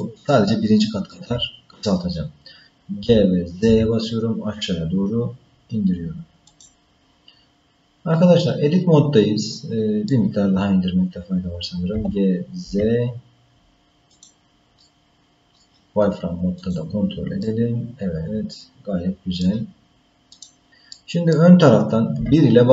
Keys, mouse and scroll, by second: 0.0-1.1 shift+middle drag, 3.1 g, 7.6-8.1 scroll down 2, 8.1-10.1 middle drag, 10.4-10.8 scroll up 1, 11.1-11.9 scroll up 1, 11.9 g, 14.8 middle click, 16.6 click, 17.4-19.4 middle drag, 20.3 click, 20.9 middle click, 22.2 KP_1.